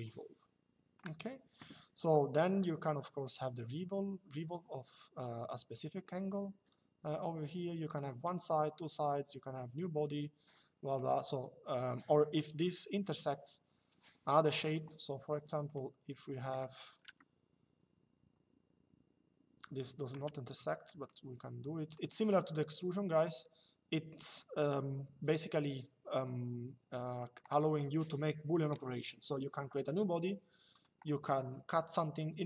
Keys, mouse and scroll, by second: 2.3 click, 10.7 click, 15.4 click, 16.9 shift+middle click, 20.8 click, 30.4 click.